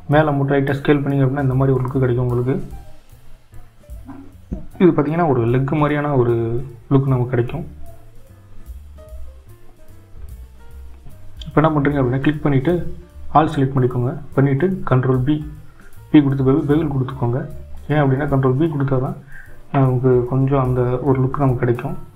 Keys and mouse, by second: 3.9 s, 10.4 click, 10.6 click, 12.0 click, 14.5 click.